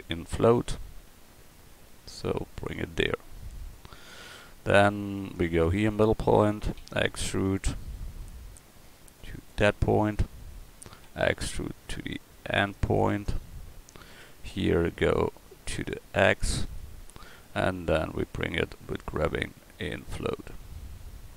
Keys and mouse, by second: 0.9 g, 3.0 click, 3.9 click, 5.3-6.8 drag, 6.8 e, 11.1 e, 14.1-15.4 drag, 15.4-16.8 middle drag, 16.8 click, 19.0 g.